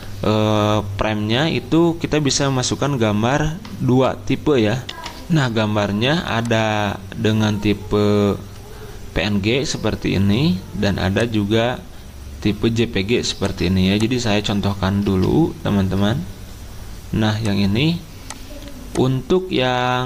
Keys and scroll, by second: 4.9 F10, 15.1 alt+Tab.